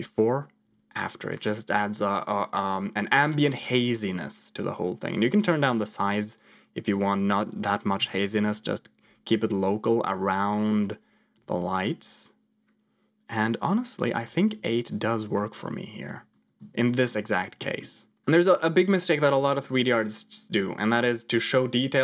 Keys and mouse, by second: 0.6 m, 5.9 click, 6.7 click, 7.9 m, 8.4 m, 8.9 m, 9.2 m, 10.3 m, 10.8 m, 11.3 m, 11.6 m, 14.1 m, 14.5 m, 16.2 click, 17.6 middle click, 18.1 click.